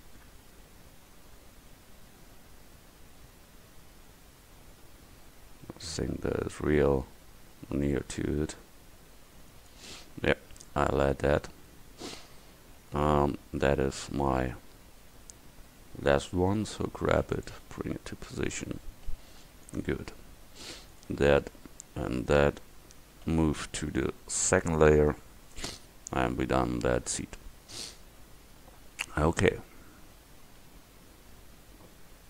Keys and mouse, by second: 8.0 middle click, 9.4 middle click, 11.9 KP_1, 16.5 g, 17.7 s, 19.1 g, 20.1-20.9 drag, 20.9 right click, 22.3 click, 23.3 m.